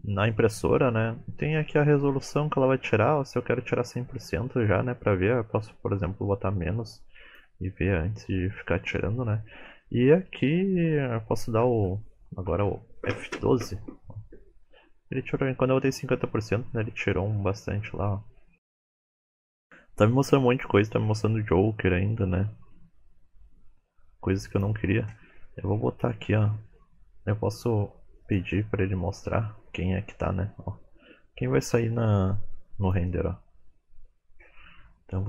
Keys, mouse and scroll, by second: 3.2 click, 25.3-27.0 scroll down 8, 26.2-27.0 scroll up 1, 28.2 click, 28.2-28.7 scroll up 1.